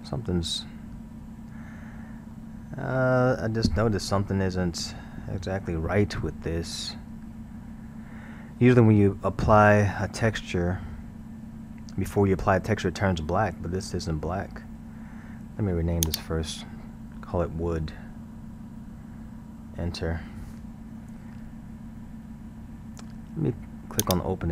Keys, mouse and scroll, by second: 1.7 scroll, 2.4-4.1 middle drag, 4.1-4.5 scroll, 5.0-6.1 middle drag, 6.1 scroll, 16.1-18.1 drag, 18.1 o, 24.0 click.